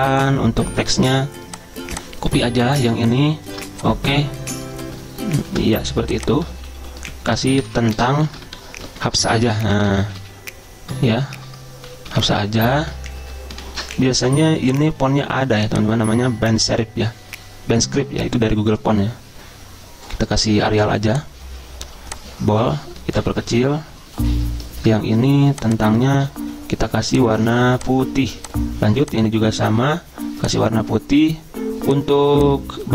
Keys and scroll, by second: 3.5 ctrl+c, 4.3 Return, 4.5 Return, 4.6 Return, 4.7 Return, 4.9 Return, 5.1 Return, 5.5 ctrl+v, 7.0-12.9 typing, 8.5 ctrl+shift+Right, 8.9 ctrl+shift+Right, 13.2 ctrl+shift+Left, 13.5 ctrl+shift+Left, 23.2 ctrl+[, 23.3 ctrl+[, 23.4 ctrl+[, 23.5 ctrl+[.